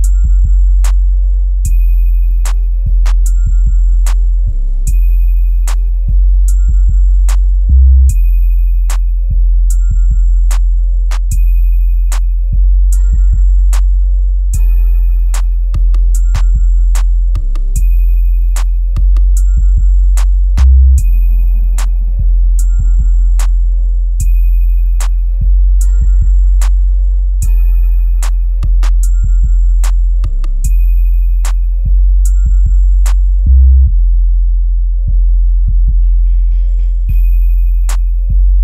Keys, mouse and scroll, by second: 0.6-1.9 drag, 1.9-2.5 scroll down 1, 2.5 click, 4.7-6.1 scroll up 1, 6.1-8.0 drag, 8.0-8.4 scroll down 1, 10.1-12.8 drag, 12.8 right click, 13.3 scroll up 1, 15.1-17.4 shift+drag, 18.9-22.9 shift+drag, 22.9 scroll down 1, 23.7-25.4 drag, 25.4 scroll up 1, 26.5-28.1 drag, 28.1 scroll down 1, 29.9-32.6 drag, 33.4-34.3 scroll down 1, 34.3-35.6 drag, 35.6 scroll up 1, 37.2-38.6 drag.